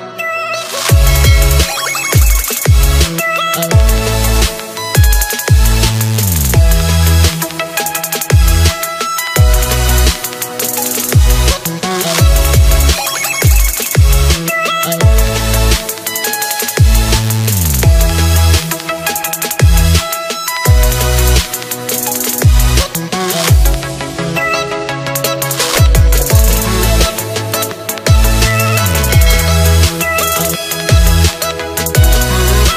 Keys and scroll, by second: 4.3 ctrl+d, 9.9 ctrl+z.